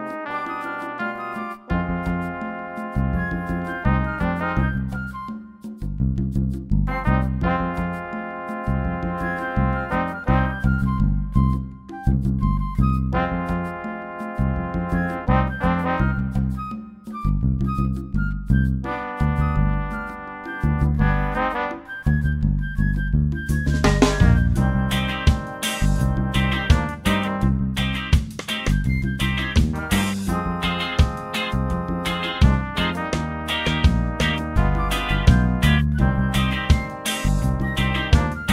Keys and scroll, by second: 16.5-21.2 typing, 25.6 ctrl+t.